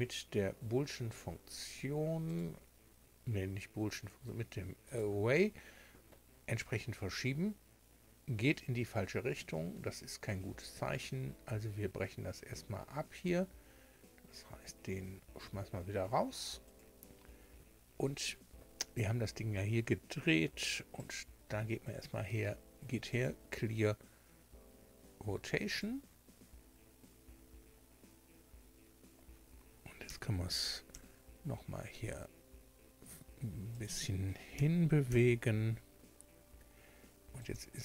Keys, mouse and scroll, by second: 1.1 click, 2.3 click, 4.8 click, 13.2 click, 14.4 Escape, 16.6 click, 17.4 Escape, 21.0 click, 23.1 click, 25.7 click, 30.0 g, 30.9 x, 33.7 click, 34.5 g, 35.1 y, 37.4 click.